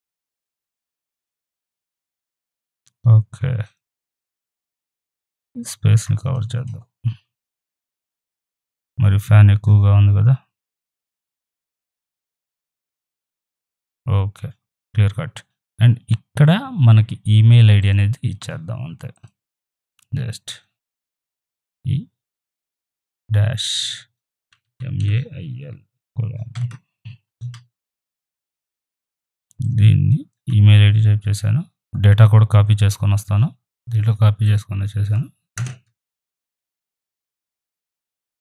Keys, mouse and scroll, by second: 0.9 click, 1.6-1.9 scroll down 1, 1.9 click, 2.2-2.8 scroll down 1, 3.7 right click, 3.9-6.3 drag, 6.3 Down, 8.9 ctrl+t, 10.9 click, 11.6-15.4 shift+drag, 17.8 click, 21.6 shift+e, 24.2-26.8 typing, 29.9-33.5 drag, 35.6 space, 36.4 ctrl+v, 37.1 ctrl+t, 37.7-38.4 alt+drag.